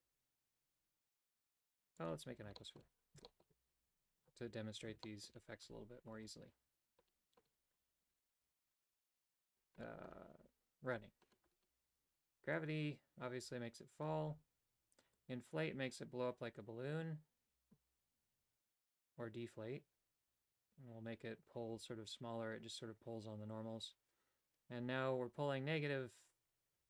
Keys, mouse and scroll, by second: 2.6 shift+middle click, 3.3 shift+middle click, 4.2 click, 5.1 shift+middle click, 5.7 Tab, 6.1 right click, 10.9 click, 12.5-14.1 drag, 15.2-26.8 drag.